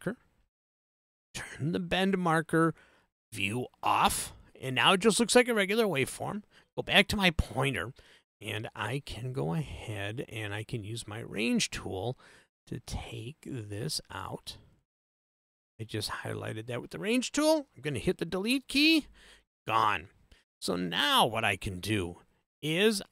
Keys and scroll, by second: 19.0 BackSpace.